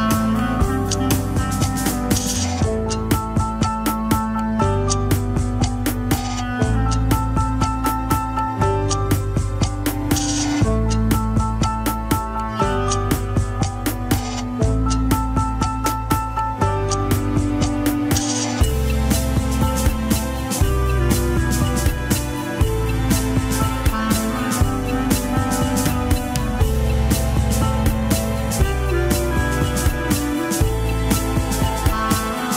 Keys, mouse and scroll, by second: 0.2 KP_1, 0.4 scroll down 2, 1.9 click, 2.2 scroll up 2, 2.5 Tab, 2.7 scroll down 1, 3.5 alt+h, 4.3 click, 7.3 scroll up 3, 7.6 Tab, 7.8 alt+z, 8.2 a, 9.3 alt+z, 9.8 click, 10.4 g, 11.9 alt+z, 12.8 alt+z, 13.1 g, 14.0 shift+z, 14.7 alt+z, 15.2 g, 17.3 scroll down 1, 17.6 shift+s, 18.0 alt+z, 18.4 Tab, 20.2-21.7 drag, 22.0 Tab, 22.3 scroll up 1, 22.5 r, 25.4 scroll down 4, 31.7-32.0 scroll up 3, 32.0 Tab, 32.3 click.